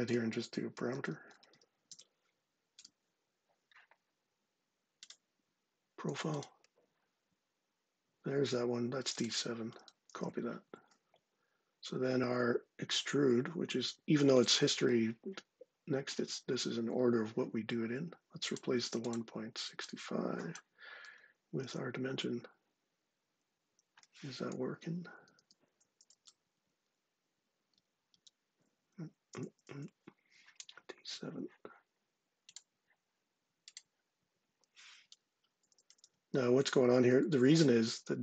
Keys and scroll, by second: 0.3-2.2 typing, 2.6 Return, 9.9 super+c, 10.5 ↻, 21.4 super+v, 25.0 Left, 25.7 Right, 26.4 Tab, 28.0 Return, 28.5 Right, 29.3 Right, 35.5 Right, 35.7-36.8 typing, 37.6 Right.